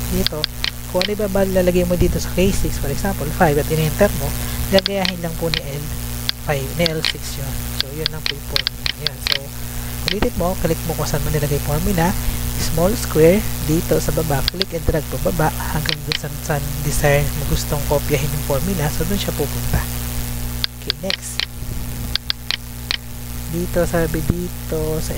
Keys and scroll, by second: 2.6 5, 3.6 Return, 7.5 Delete.